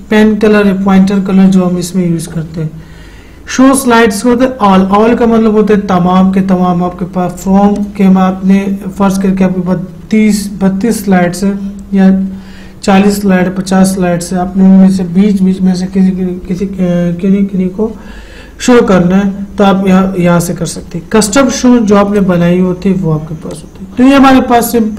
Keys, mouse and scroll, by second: 8.1 click, 22.5 click.